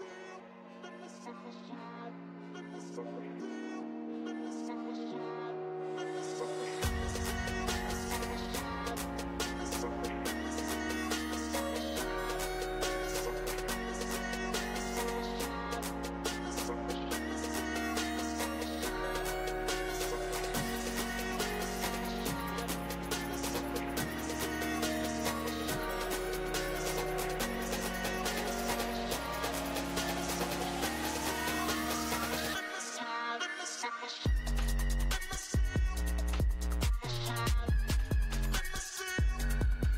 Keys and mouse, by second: 6.8 right click, 7.0-9.4 middle drag, 9.4-12.8 drag, 12.8 middle click, 23.0 ctrl+z, 23.5 ctrl+z, 27.8 ctrl+z, 37.6 ctrl+z.